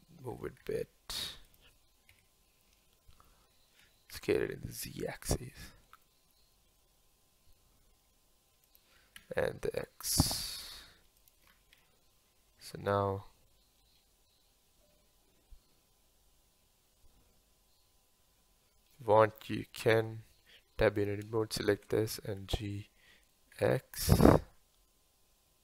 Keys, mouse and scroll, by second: 0.3 g, 2.1 KP_1, 3.8 s, 6.6 g, 9.1 s, 11.5-11.8 scroll down 1, 11.8-16.0 middle drag, 19.2-20.0 middle drag, 20.0 Tab, 21.0 click, 21.6 shift+click, 22.4 g.